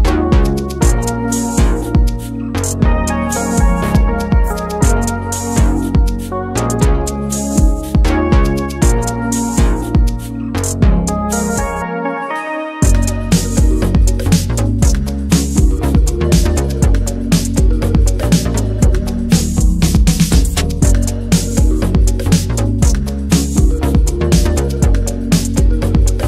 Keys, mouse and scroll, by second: 0.0 n, 0.2-1.0 middle drag, 1.0 a, 1.2 x, 3.0 click, 3.2-3.8 middle drag, 3.8 click, 4.0 shift+a, 7.5-7.9 scroll up 5, 7.9 middle click, 8.2 right click, 9.0 click, 9.2-10.9 right drag, 10.9 click, 11.8 drag, 12.0-12.6 scroll down 1, 13.0-13.6 drag, 14.4 click, 14.6 click, 14.9 alt+middle click, 14.9 scroll down 1, 15.0-15.7 alt+middle drag, 15.7 r, 17.0-17.8 middle drag, 17.8 Tab, 17.9-19.2 middle drag, 19.2 3, 19.4 click, 20.7 click, 20.9 alt+middle click, 21.2 alt+middle click, 21.5 a, 21.9 alt+z, 22.1 middle drag, 22.4 alt+z, 22.6 ctrl+drag, 22.9 middle click, 23.4 x, 24.1 click, 24.9 alt+middle click, 25.7 click.